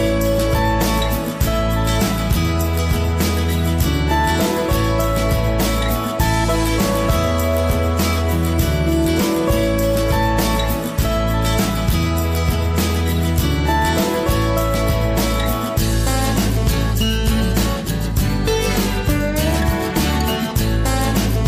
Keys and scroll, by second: 7.6 space.